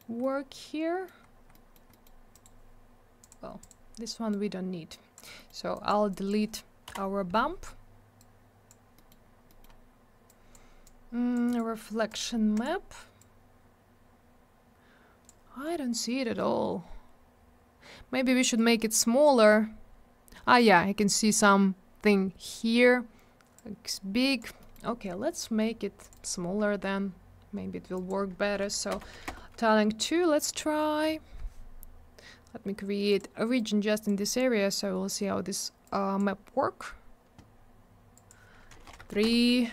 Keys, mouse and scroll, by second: 0.2 middle click, 1.3 scroll up 1, 1.5 middle click, 1.9 middle click, 2.0 middle click, 2.3 right click, 2.4 double right click, 3.2 click, 3.3 click, 3.6 click, 3.7 double click, 4.3 click, 5.4 middle click, 5.5 middle click, 5.7 click, 5.9 double click, 6.1 click, 6.3 click, 8.2 click, 9.0 middle click, 9.1 middle click, 9.2 scroll down 1, 9.5 middle click, 9.6 middle click, 10.3 click, 10.9 click, 11.5 right click, 11.6 right click, 12.1 click, 12.2 click, 12.6 click, 12.6 click, 13.2 click, 15.9 scroll up 1, 17.3 scroll down 1, 18.6 click, 23.6 click, 24.6 middle click, 24.7 middle click, 24.9-25.9 scroll up 1, 26.0 click, 26.1 click, 26.1 click, 26.2 click, 27.9 click, 28.1 click, 28.7 2, 28.9 Return, 29.0 Tab, 29.1 2, 29.3 Return, 32.1-33.1 scroll down 1, 33.1 click, 33.2 click, 33.6 click, 34.3-34.9 scroll up 1, 35.9 click, 38.2 click, 38.3 click, 38.7 3, 38.9 Return, 39.0 Tab, 39.1 3, 39.2 Return.